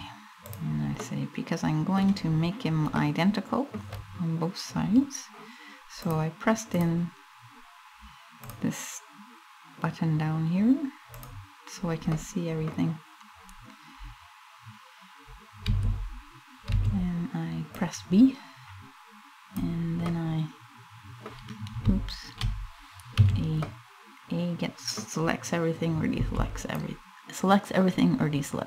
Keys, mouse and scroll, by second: 0.1 click, 0.7 middle click, 1.6 scroll down 1, 2.6 middle click, 3.0 middle click, 5.7 click, 6.4 click, 8.0 click, 10.7 click, 11.8 middle click, 15.2 m, 16.3 b, 19.7 middle click, 22.9 a, 23.2 middle click, 25.8 b.